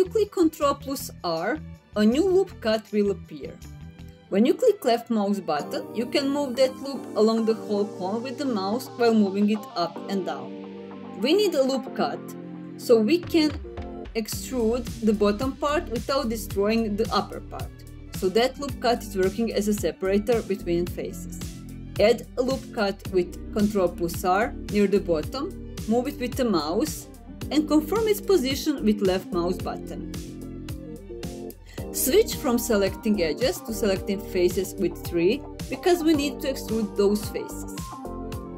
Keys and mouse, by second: 1.7 ctrl+r, 11.9 ctrl+z, 19.1 middle click, 20.8 middle click, 22.0 ctrl+r, 29.1 click, 30.2 middle click, 34.7 click, 35.3 3.